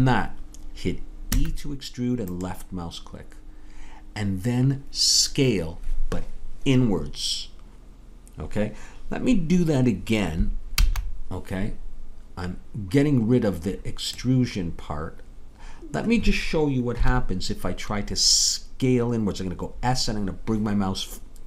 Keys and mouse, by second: 1.3 e, 10.9 ctrl+z, 17.0 KP_3.